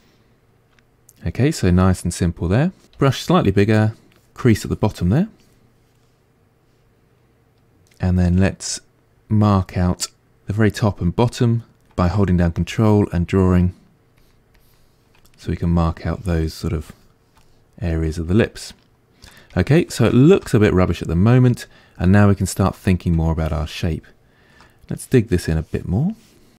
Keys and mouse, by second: 3.0 f, 6.1-12.6 middle drag, 12.6-15.4 ctrl+drag, 15.4 middle click, 16.2-17.4 ctrl+drag, 17.4-25.5 middle drag, 25.5-26.5 drag.